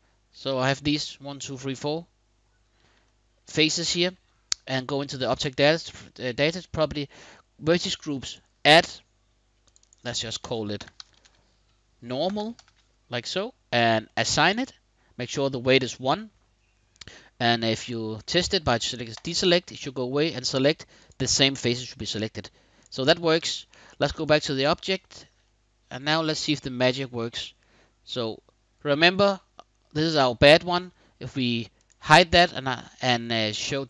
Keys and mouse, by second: 2.7 shift+click, 3.3 click, 5.1 click, 8.0 click, 9.3 click, 9.6-14.0 drag, 18.8 click, 20.6 click, 21.2 middle click, 22.5 click, 23.0 middle click, 23.5 Tab, 24.8 shift+middle drag, 25.2-27.4 middle drag, 31.5 click.